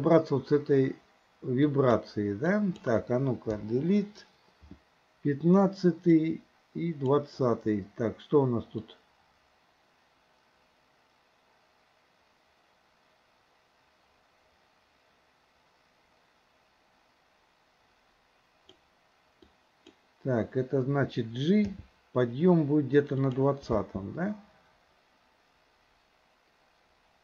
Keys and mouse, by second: 1.7-2.1 drag, 2.6-3.0 drag, 3.7 Delete, 6.3 click, 8.9-18.9 drag, 19.5-20.0 drag, 21.7 g, 23.8 space.